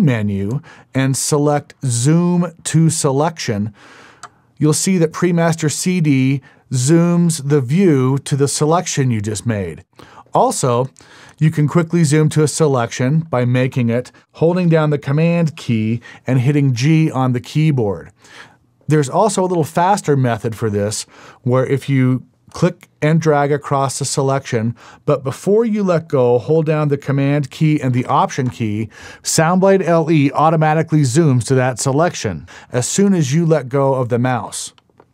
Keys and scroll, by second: 17.0 super+g.